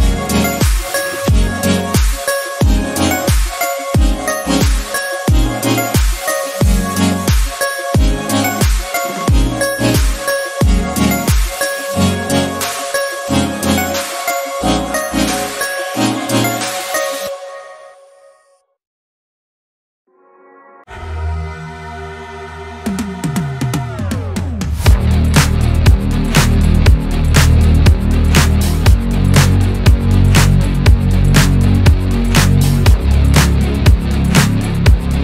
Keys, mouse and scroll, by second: 0.1 click, 0.4 click, 1.8-8.9 drag, 11.0 scroll up 2, 11.6-13.5 drag, 13.5 scroll down 1, 13.7 middle click, 14.6-15.1 scroll up 2, 15.3 scroll down 2, 15.8 KP_1, 16.1 scroll down 1, 16.3-19.6 middle drag, 19.6-26.4 drag, 29.3-30.5 drag, 30.5 scroll up 2, 31.3 click, 31.8 Tab, 33.4-34.8 drag.